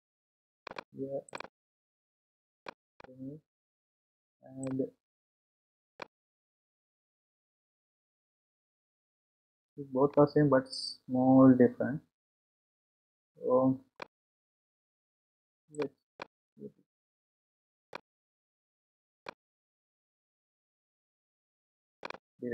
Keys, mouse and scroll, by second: 1.3-3.0 drag, 5.9 click, 8.9 scroll up 2, 9.4-10.3 scroll down 5, 10.3-13.3 middle drag, 15.7 click, 18.7 click, 22.2-22.5 drag.